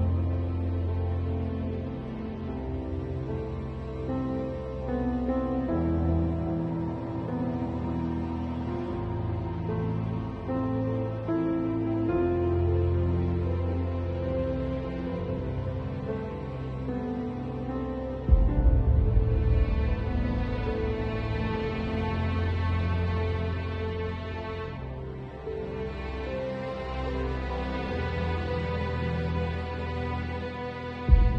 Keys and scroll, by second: 1.4 5, 3.2 space, 5.2 x, 6.7 space, 8.0 x, 13.9 x, 15.0 5, 21.7 x, 23.0 space, 23.5 v, 26.2 b, 26.9 x, 29.8-30.7 typing.